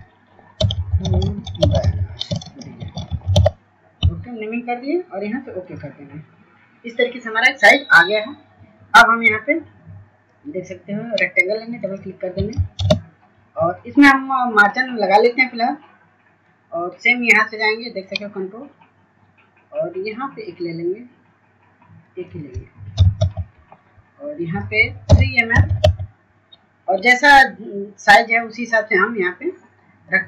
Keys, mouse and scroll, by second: 0.6 f, 5.7-18.2 drag, 25.9 Tab.